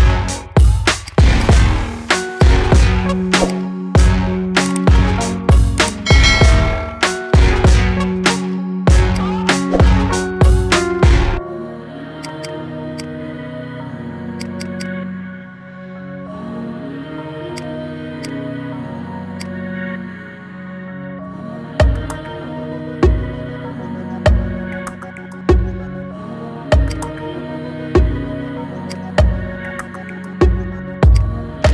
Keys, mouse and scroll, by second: 0.5 Tab, 0.8-2.1 right drag, 2.1 click, 2.7-3.2 scroll down 4, 3.2-3.8 drag, 4.2 scroll up 1, 4.5-5.1 middle drag, 5.1 scroll up 2, 5.5-5.9 middle drag, 5.9-6.4 scroll down 3, 7.7 ctrl+2, 8.1-8.6 middle drag, 8.6-9.0 scroll up 2, 9.0 click, 10.1-11.1 scroll up 2, 11.1 ctrl+r, 12.7 click, 14.1 click, 14.3 alt+shift+click, 14.5 alt+shift+click, 15.3 p, 16.6 Tab, 17.3 click, 18.0 click, 18.4-19.1 scroll down 3, 19.1 click, 20.7 KP_3, 21.5-22.0 scroll down 4, 22.0-23.1 shift+middle drag, 23.1 scroll down 4, 26.6-29.2 right drag, 30.0-31.0 scroll down 6, 31.0 click, 31.2-31.7 scroll down 3.